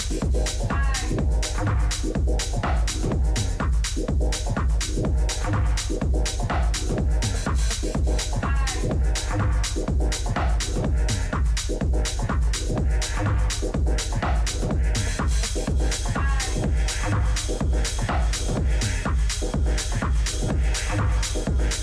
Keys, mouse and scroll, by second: 1.3-3.2 drag.